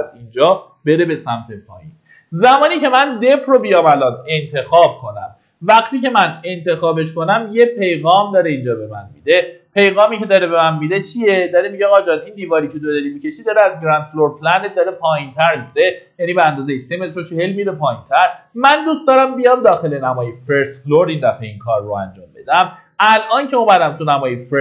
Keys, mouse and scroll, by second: 4.6-4.9 scroll down 1, 6.5-16.6 drag, 22.7 middle click.